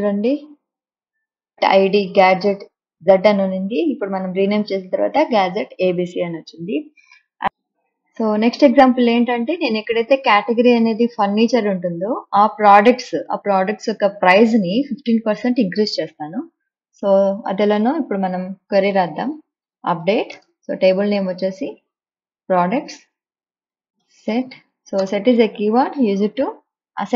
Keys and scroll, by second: 19.1-21.5 typing, 23.9 space, 24.4 s, 24.9 t, 25.4 space.